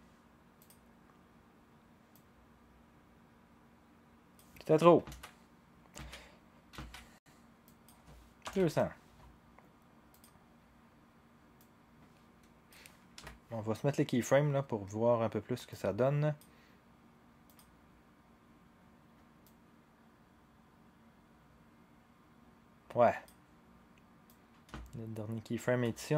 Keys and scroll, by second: 5.1 ctrl+shift+z, 6.0 ctrl+z, 6.8 ctrl+z, 8.2-9.1 typing, 13.1 u.